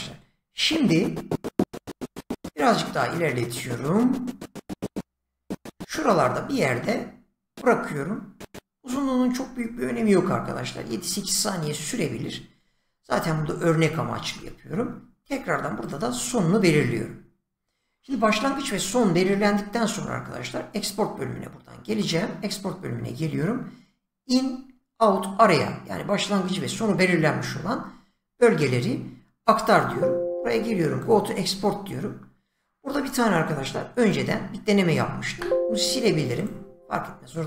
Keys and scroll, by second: 35.3 Delete.